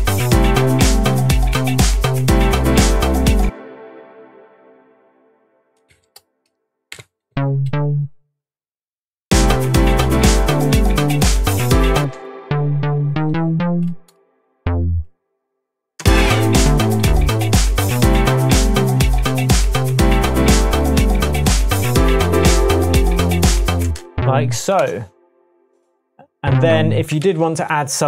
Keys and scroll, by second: 1.5 p, 3.4 space, 5.9 Up, 6.9 p, 7.3 Up, 7.6 Up, 12.0 space, 13.1 Up, 13.9 Up, 14.6 Down, 16.0 space, 16.9 space, 17.0 Down, 23.8 space, 24.8 BackSpace, 27.2 super+d, 27.7 Tab.